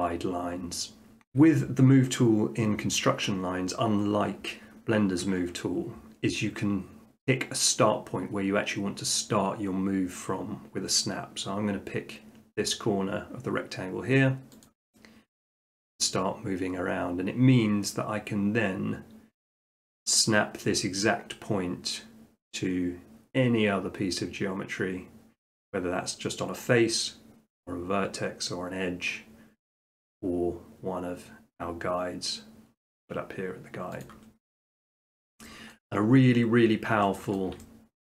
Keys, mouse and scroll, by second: 1.1 middle click, 1.2 middle click, 1.3 shift+middle click, 14.6 click, 34.0 click, 34.4 middle click, 35.1 shift+middle click, 35.7 middle click, 36.9 middle click, 37.4 shift+middle click.